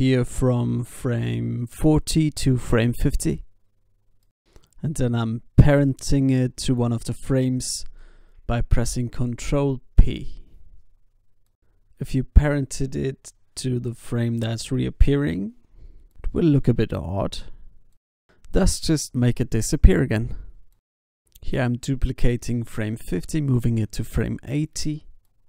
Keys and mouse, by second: 1.8 s, 3.0 i, 3.6 ctrl+s, 4.0 alt+a, 4.4 alt+a, 4.7 ctrl+s, 7.7 ctrl+p, 9.2 alt+a, 12.0 alt+a, 12.2 ctrl+s, 16.7 s, 17.8 i, 18.4 alt+a, 19.3 alt+a, 20.1 ctrl+z, 20.2 ctrl+z, 20.7 ctrl+z, 21.2 alt+space, 21.9 alt+a, 22.7 alt+a.